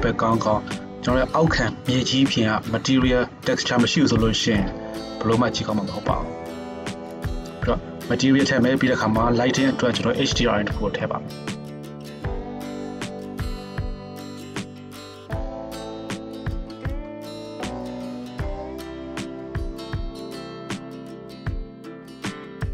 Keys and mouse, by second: 7.3 Tab, 11.8 middle click, 12.0-13.7 drag, 13.7 middle click, 13.9 shift+click, 14.2 shift+middle click, 14.3-19.7 drag, 19.7 middle click, 19.9-22.7 drag, 21.4 right click.